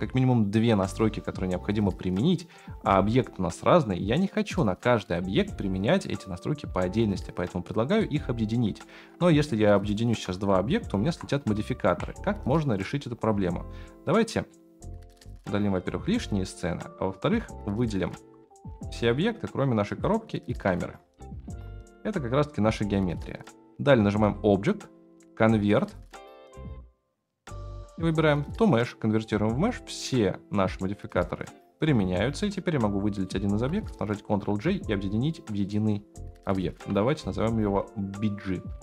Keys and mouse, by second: 5.0 click, 6.2 click, 7.6-8.0 middle drag, 8.8-9.1 shift+middle drag, 9.4 click, 9.8 shift+click, 10.9 ctrl+j, 11.8 ctrl+z, 13.8-14.5 middle drag, 15.2 click, 15.4 x, 18.1 a, 21.2-21.6 shift+right drag, 21.8 g, 24.2-29.2 right drag, 29.2-29.6 middle drag, 30.8-31.2 middle drag, 33.2-33.6 shift+drag, 34.3 ctrl+j, 35.4-37.0 drag, 38.6 middle drag.